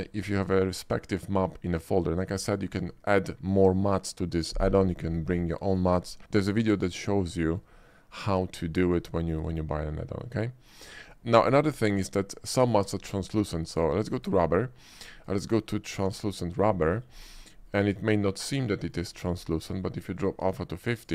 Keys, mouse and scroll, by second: 6.3 shift+middle drag, 7.2-7.7 shift+middle drag, 7.9-8.5 shift+middle drag, 8.8 shift+middle click, 9.2 shift+middle click, 10.2 shift+middle click, 13.0 click, 14.2 click, 15.0 click, 16.1 click, 16.9 middle drag, 17.5 middle click, 17.6 shift+middle click, 17.9-19.0 shift+middle drag, 19.2 shift+middle drag, 19.5 shift+middle click, 20.2-21.1 shift+drag.